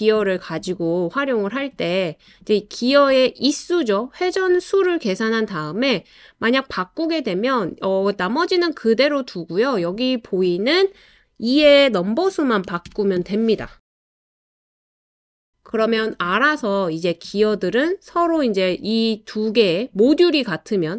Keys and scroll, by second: 12.4-13.9 typing.